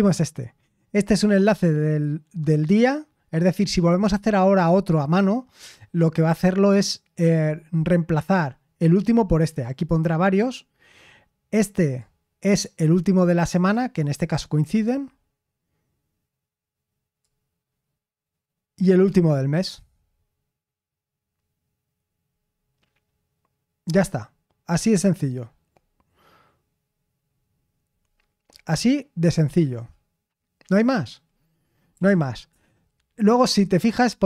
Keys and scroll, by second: 31.7-32.5 typing.